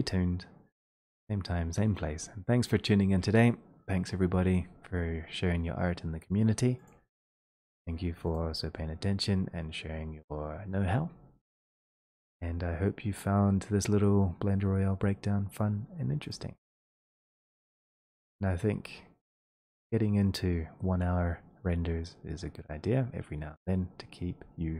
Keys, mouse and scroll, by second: 6.9 click, 16.3 click, 22.9-24.7 drag.